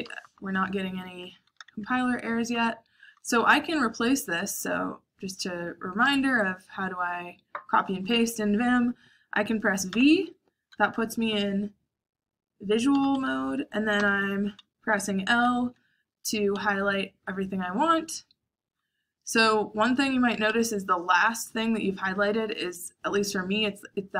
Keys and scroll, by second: 0.0-3.9 typing, 9.8 shift+v, 12.9 l, 13.9 l, 16.4 l, 19.8 h, 20.5 l, 22.7-23.1 typing.